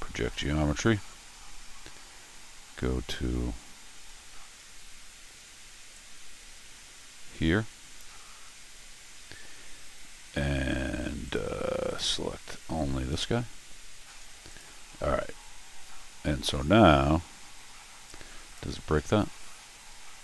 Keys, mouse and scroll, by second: 0.2 x, 4.6 middle click, 5.9-8.0 drag, 8.3 scroll down 1, 8.7 middle click, 11.2 click, 11.9 click, 14.5 click, 18.1 click.